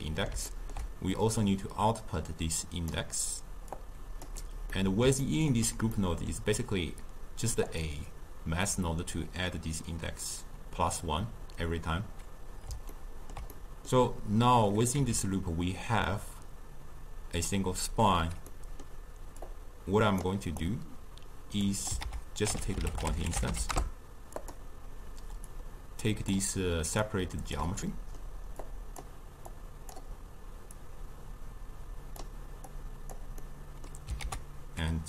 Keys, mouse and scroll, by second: 0.0-1.4 middle drag, 1.4 drag, 3.8-4.7 drag, 4.7-7.7 middle drag, 7.7 click, 12.9-15.0 ctrl+middle drag, 15.0 n, 18.5 middle click, 19.5 click, 20.7 click, 22.0 ctrl+a, 25.5-27.2 drag, 28.0 middle click, 28.7 click, 29.5 click, 30.8 click, 32.7 click, 33.5-34.2 middle drag, 34.2 ctrl+a.